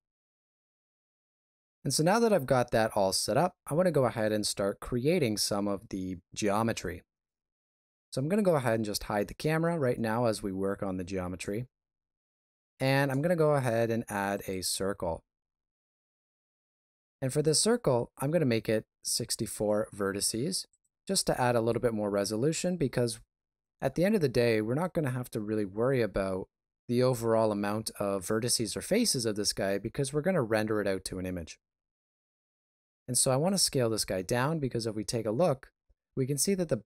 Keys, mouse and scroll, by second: 0.8 click, 8.0 right click, 9.1 h, 10.4 shift+middle click, 11.6 middle click, 12.9 shift+a, 15.5 shift+middle click, 17.4 click, 20.7 click, 35.0 shift+z.